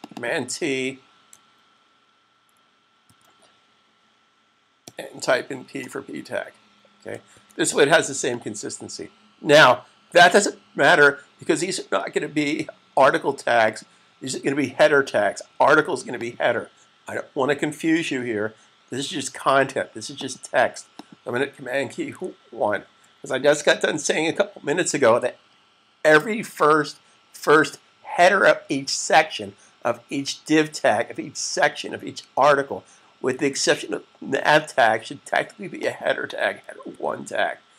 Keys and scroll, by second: 2.8 super+t, 7.7 s, 22.3 super+1, 36.7 super+1.